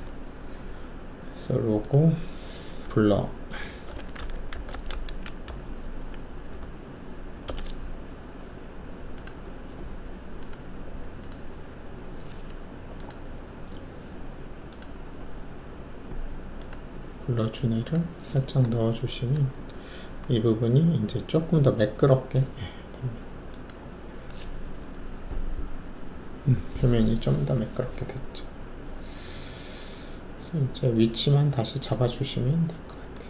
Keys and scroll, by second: 3.8-4.9 typing, 5.4 Delete, 5.6 Delete, 5.8 Delete, 6.0 Delete, 6.5 Delete, 7.4 Return, 19.0 shift+F1.